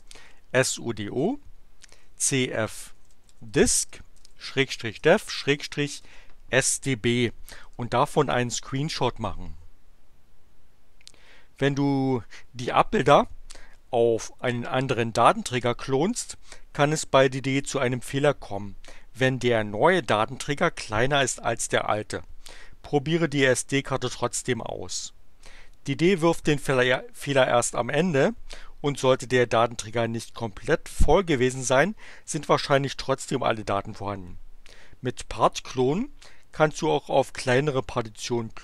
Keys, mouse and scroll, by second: 0.0-5.9 typing, 7.7 Return.